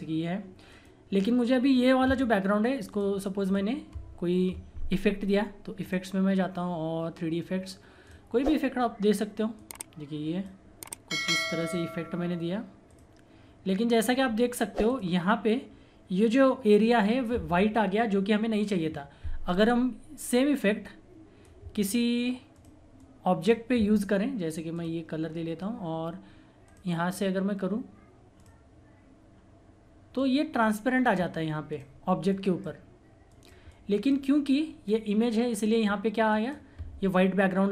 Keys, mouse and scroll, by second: 0.7 right click, 0.7 right click, 2.9 click, 5.8-11.5 drag, 9.7 typing, 17.5 typing, 19.5-36.4 drag, 20.6 typing.